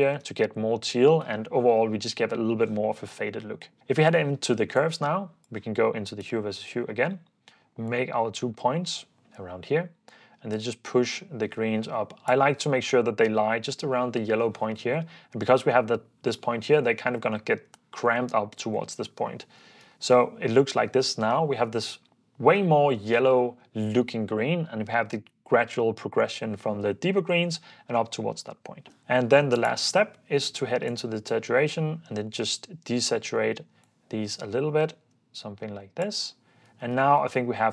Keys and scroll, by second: 0.8 ↺, 1.4 super+s, 19.0 super+f, 19.6 super+d, 36.2 super+f, 36.8 super+d.